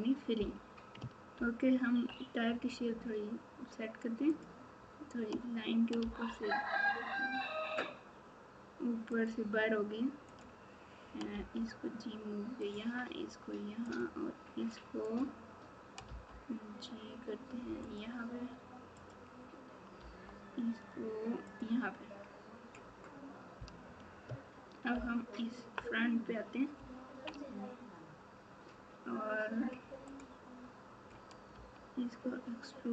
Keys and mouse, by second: 10.3 click, 12.6 g, 18.9 click, 24.9 ctrl+KP_4, 25.4 ctrl+KP_4, 26.7 ctrl+KP_2, 31.5 e.